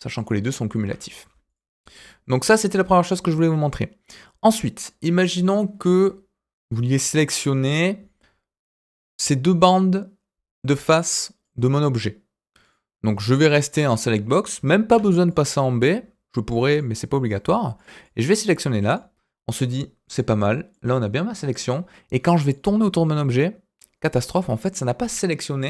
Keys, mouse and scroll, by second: 1.0-1.4 scroll down 2, 1.4 click, 4.1-4.6 scroll up 2, 8.8-11.4 drag, 12.6 click, 14.8 b, 17.7 click, 18.0 click, 20.3-20.7 scroll down 3, 20.7 middle click, 21.5-21.9 scroll down 1, 22.5-25.6 middle drag.